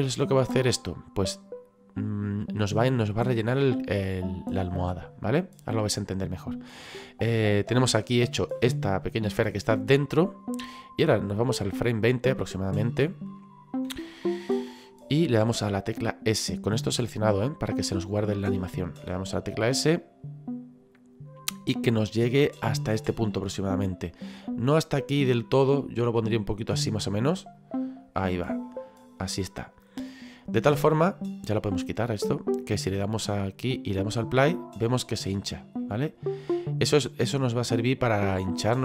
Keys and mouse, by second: 9.0 middle click, 11.9 click, 13.9 KP_1, 27.6 click, 28.6 middle click, 30.0 middle click, 31.9 click, 34.2 click, 35.8 middle click, 38.7 click.